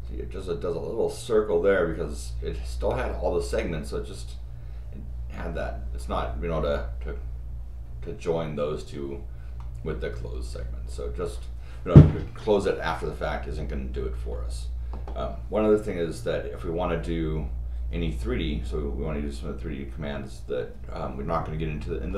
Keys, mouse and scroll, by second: 6.1 scroll down 2, 9.6 middle click.